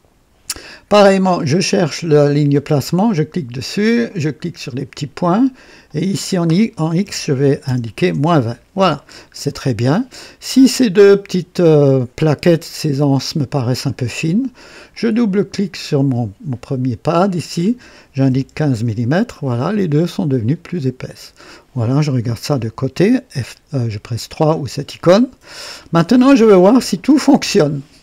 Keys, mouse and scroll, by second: 1.0-1.3 scroll up 2, 2.9 click, 4.2 click, 5.9 click, 7.1 KP_Subtract, 7.4 KP_2, 7.7 KP_0, 8.0 KP_Enter, 8.9-9.7 typing, 9.4 scroll down 2, 14.9 click, 18.3 KP_1, 18.5 KP_5, 18.7 KP_Enter, 20.5-21.4 drag, 21.5 click, 22.5 KP_3, 24.4 click, 25.2-25.8 right drag.